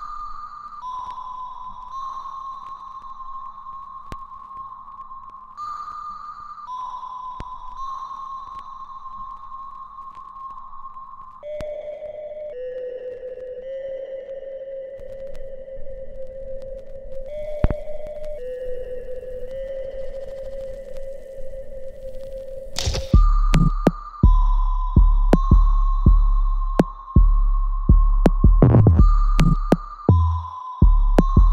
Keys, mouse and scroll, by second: 1.1 right click, 1.8 click, 2.1-3.4 alt+drag, 3.4-4.8 right drag, 4.8 click, 5.3 right click, 6.5 click, 9.4 alt+click, 11.6 alt+right click, 11.9-13.2 alt+drag, 13.2-18.4 ctrl+drag, 18.4 alt+click, 19.5 alt+right click, 20.0 alt+click, 20.4 alt+middle click, 20.9-22.5 alt+drag, 22.5 right click, 23.3 click, 23.7 alt+right click, 24.2 alt+click, 24.9-29.8 alt+right drag, 29.8 click.